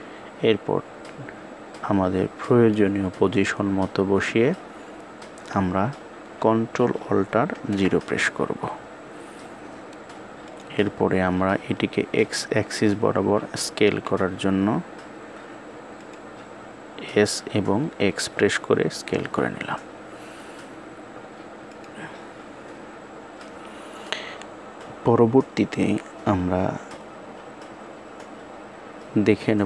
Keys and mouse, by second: 7.2 ctrl+alt+KP_0, 10.1 click, 13.4 s.